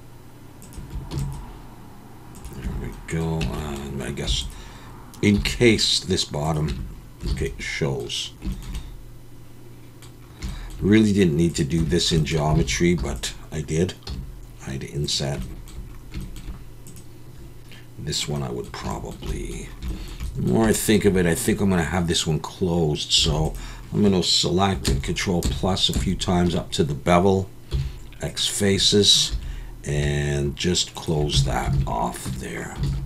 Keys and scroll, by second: 1.1 ctrl+r, 2.6 Tab, 3.4 Tab, 4.3 3, 5.3 i, 6.7 Tab, 7.3 alt+a, 11.8 Tab, 12.6 alt+a, 13.0 3, 14.1 i, 23.3 alt+a, 24.8 ctrl+KP_Add, 25.4 ctrl+KP_Add, 25.9 ctrl+KP_Add, 27.7 x, 29.3 2, 31.3 f, 31.7 alt+a, 32.2 Tab, 32.8 alt+a.